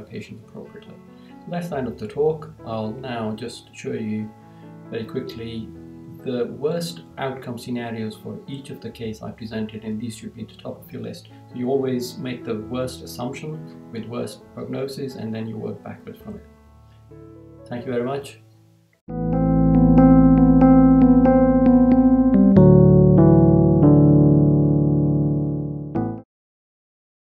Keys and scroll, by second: 3.6 Right, 17.3 Right, 18.4 Right.